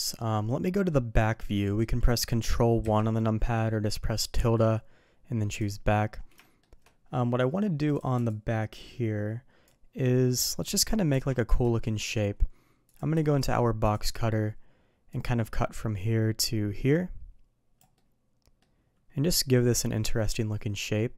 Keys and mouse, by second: 0.6 middle drag, 1.6 middle click, 6.4 shift+middle drag, 11.7-12.1 shift+middle drag, 12.9 click, 13.1 d, 15.1-21.1 drag, 18.0-21.1 middle drag.